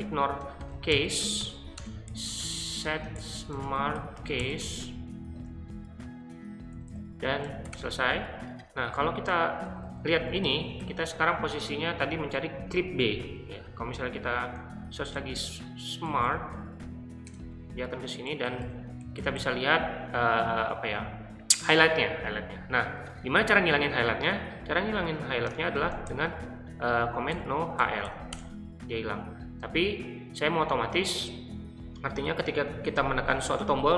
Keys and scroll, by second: 0.0-0.7 typing, 6.6-8.1 typing, 9.5-10.8 typing, 14.6-17.0 typing, 17.3 Return, 18.0-19.8 typing, 25.7-28.5 typing.